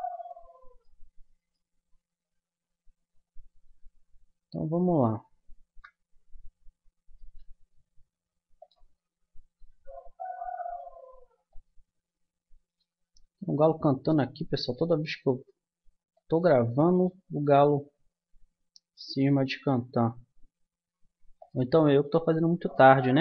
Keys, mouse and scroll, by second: 2.7 Tab, 3.8 Tab, 5.6 KP_0, 7.2 g, 9.6 r, 12.8 r, 17.4 g.